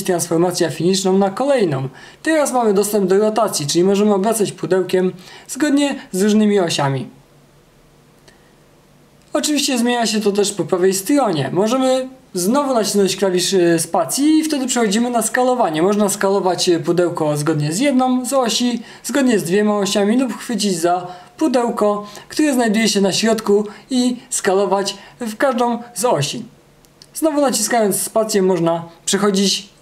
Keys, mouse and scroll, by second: 4.9 space.